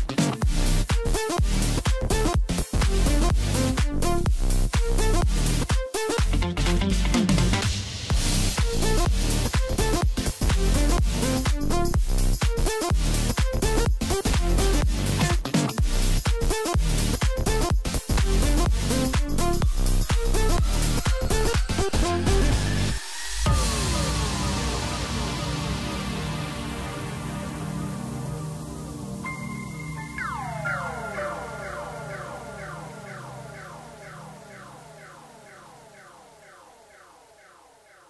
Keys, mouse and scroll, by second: 3.5 scroll down 3, 3.7-4.6 middle drag, 4.6-5.4 scroll up 1, 5.4 click, 5.9 scroll up 1, 6.3 Tab, 6.8-9.9 middle drag, 9.9 click, 10.3 click, 11.6 shift+click, 13.2 ctrl+b, 20.1 scroll down 2, 20.8 3, 21.5-22.6 scroll up 1, 22.6 shift+d, 25.9-29.0 middle drag, 31.2 e, 35.6 ctrl+KP_Add, 36.4 scroll down 1, 36.6 middle click, 37.3-38.0 scroll up 2.